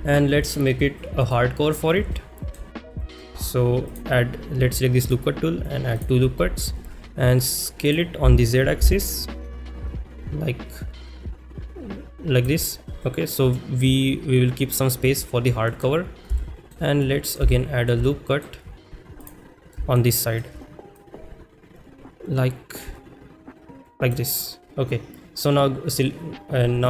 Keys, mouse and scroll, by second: 0.4 ctrl+s, 0.4 click, 2.1 shift+middle click, 3.0 shift+middle click, 3.9 click, 5.1 click, 6.0 click, 12.4 click, 13.0 middle click, 15.8 middle click, 16.4 shift+middle click, 17.1 middle click, 17.6 shift+middle click, 18.1-18.4 middle drag, 19.8 middle click, 20.2 shift+middle drag, 25.9 click.